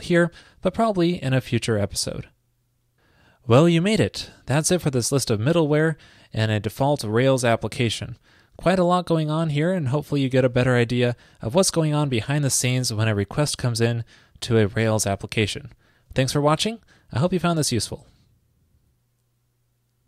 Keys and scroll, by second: 7.6-8.3 typing.